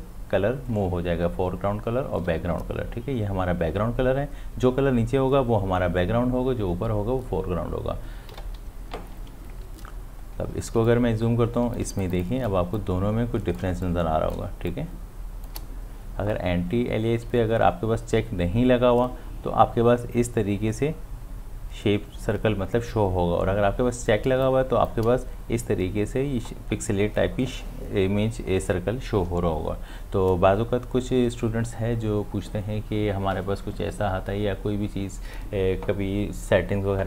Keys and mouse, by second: 2.2 x, 8.3 x, 9.9 space, 10.9 ctrl+click, 12.8-14.7 ctrl+drag, 14.7-24.3 ctrl+drag, 24.3 space, 24.5 click, 24.8 space.